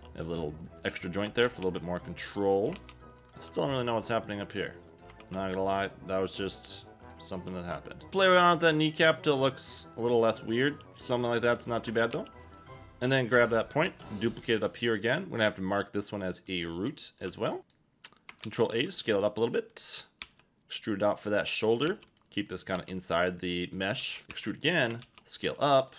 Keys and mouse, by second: 0.0 g, 1.6 a, 2.7 ctrl+a, 3.2 Tab, 3.2 KP_1, 4.1 s, 5.2 ctrl+a, 7.3 g, 8.1 Tab, 10.0 click, 10.6 g, 11.2 click, 11.6 click, 12.1 g, 12.4 click, 13.8 shift+d, 17.6 click, 17.6 s, 18.4 ctrl+a, 18.9 click, 19.1 g, 20.2 e, 21.2 click, 21.9 g, 22.4 click, 22.7 g, 23.4 click, 24.0 g, 24.2 ctrl+a, 24.2 click, 24.3 e, 24.7 click, 25.0 ctrl+a, 25.8 click.